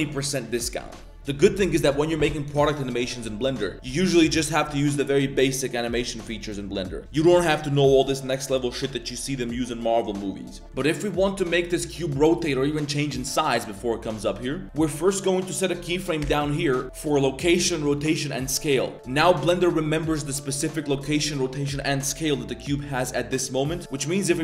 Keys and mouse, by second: 10.6 middle click, 11.5 middle click, 16.2 i, 20.4 click, 23.9-24.4 drag.